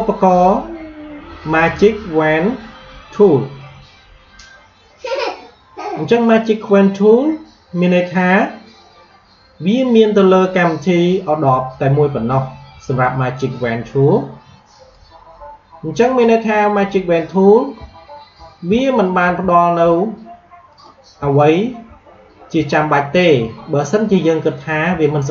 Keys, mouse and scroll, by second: 14.7 click, 17.9-18.2 alt+scroll up 1, 18.8-19.1 alt+scroll down 1, 19.4 alt+scroll up 1, 20.6 click, 21.2-21.7 alt+scroll down 1, 22.6-23.0 alt+scroll up 1, 23.5-23.9 alt+scroll down 1, 25.0 alt+scroll up 1.